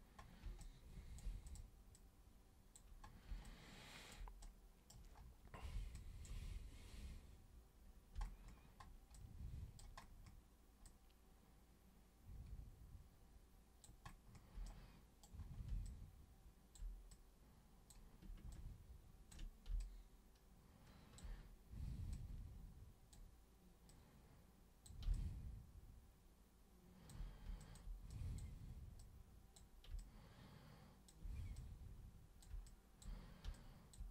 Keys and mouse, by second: 0.6-1.2 alt+drag, 1.4 click, 1.9 click, 3.4-4.2 alt+drag, 4.4 super+right click, 6.0 alt+super+click, 9.2 alt+super+click, 10.8-13.9 alt+super+drag, 14.7 super+right click, 15.8 alt+super+click, 17.1-17.9 super+drag, 18.5-19.3 ctrl+shift+super+drag, 19.8-21.2 alt+super+drag, 22.1-23.1 super+drag, 23.9 super+click, 25.1-27.1 alt+super+drag, 27.6 alt+super+click, 28.1 super+drag, 29.0-29.6 super+drag, 30.0-31.1 alt+super+drag, 31.6-32.4 super+drag, 32.7 alt+super+click, 33.6 alt+super+click.